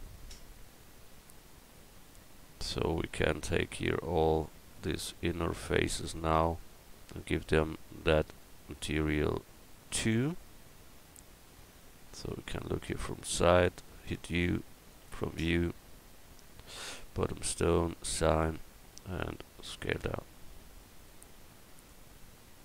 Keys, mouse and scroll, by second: 2.7 Tab, 7.0-11.1 drag, 11.3-12.4 drag, 14.2 u, 16.9-19.7 drag, 19.7 s, 22.2 Tab.